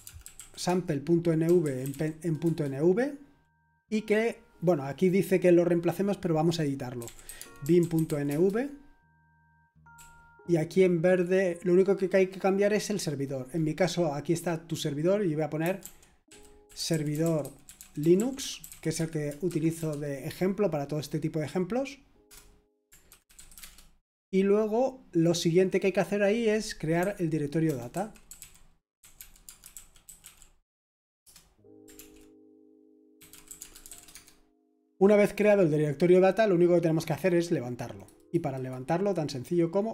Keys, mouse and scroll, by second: 0.0-2.4 typing, 6.7-11.3 typing, 15.4-20.0 typing, 22.2 Return, 23.0-24.1 typing, 27.0-30.7 typing, 31.2 Return, 31.9 ctrl+l, 32.9-35.2 typing, 37.9-39.9 drag.